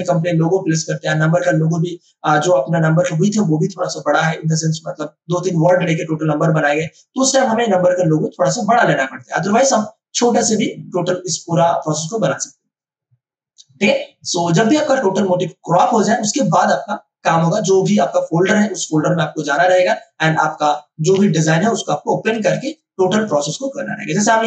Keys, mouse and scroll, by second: 21.1 ctrl+d, 21.6 ctrl+space, 22.3 ctrl+space, 23.3 ctrl+space, 23.9 space.